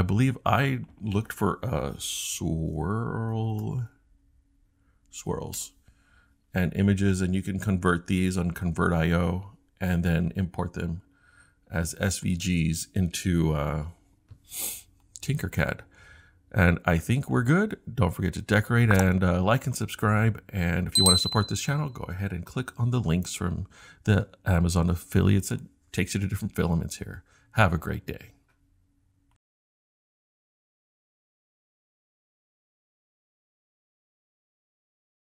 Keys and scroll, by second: 1.8-4.1 typing, 5.3 s, 5.5 Return.